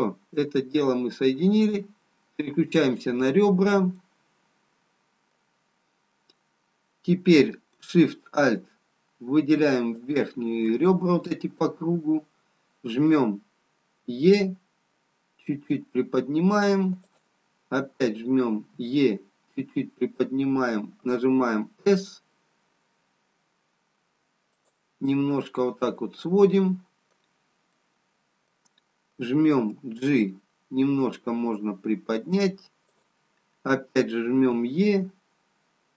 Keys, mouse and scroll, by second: 0.1 middle click, 3.2 click, 3.2-4.6 scroll down 2, 4.7 middle click, 4.7-6.1 scroll down 1, 6.1 scroll up 2, 10.2 alt+shift+click, 18.5 e, 25.3 middle click, 28.1 middle click, 32.2 g, 34.7 e.